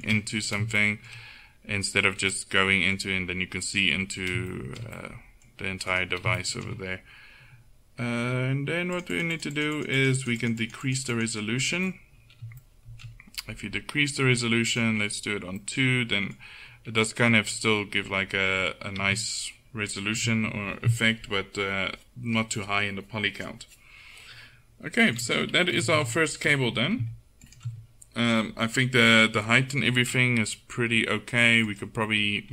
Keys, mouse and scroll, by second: 6.0 right click, 6.7-8.1 middle drag, 9.0-12.9 drag, 11.9-14.7 middle drag, 14.7-16.8 drag, 15.8 middle click, 16.8 middle click, 17.5 Tab, 18.0 Tab, 19.0 z, 20.2 z, 25.8 KP_1, 26.0 a, 27.5 right click, 27.8 click, 28.0 right click, 31.7-32.5 middle drag.